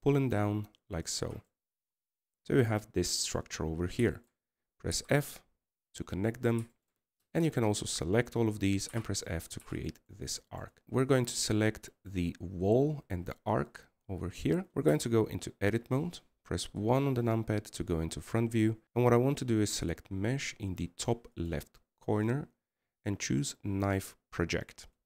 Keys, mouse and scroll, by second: 3.3-6.1 middle drag, 6.1-6.7 scroll up 2, 6.7 f, 8.2-8.5 scroll down 3, 8.5 shift+middle click, 9.0 a, 9.2 a, 10.7 f, 10.8 KP_1, 13.0 shift+right click, 13.6-15.8 middle drag, 16.7 Tab, 18.4 KP_1, 18.8-25.0 drag.